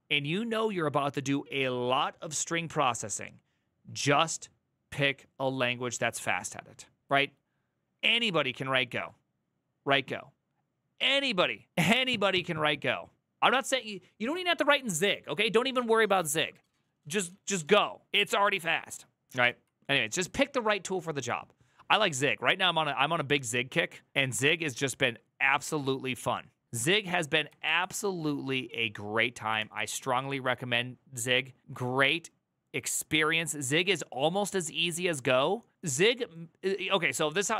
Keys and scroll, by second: 19.2 alt+[, 27.4 alt+[, 29.3 alt+{, 37.2 alt+=, 37.5 ctrl+n.